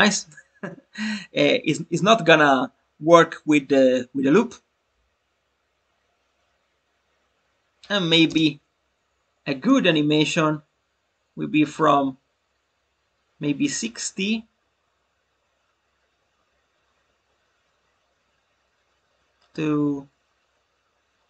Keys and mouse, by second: 9.6-21.2 drag.